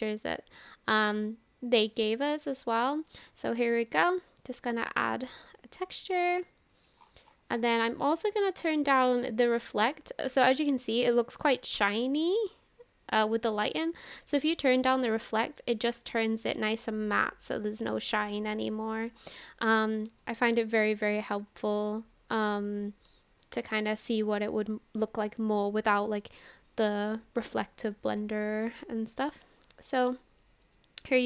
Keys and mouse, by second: 3.9 shift+middle click, 4.3 middle click, 6.2 click, 6.7 click, 10.4-11.7 middle drag, 12.1-13.6 middle drag, 14.8 click, 16.4 click, 16.9 middle click, 16.9-18.9 drag, 19.5-19.9 shift+drag, 20.2-20.7 shift+drag, 20.9-21.4 drag, 21.7 shift+middle click, 22.0 middle click, 23.2 shift+middle click, 23.7 middle click, 28.7-29.6 middle drag, 30.0-30.4 shift+middle drag, 30.7-31.1 shift+middle drag.